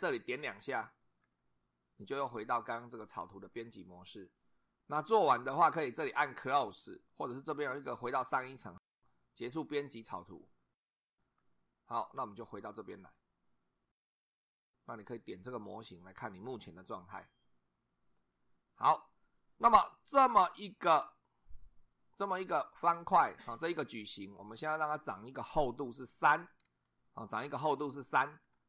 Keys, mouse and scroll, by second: 0.9 click, 11.3 click, 15.6 click, 28.5 2.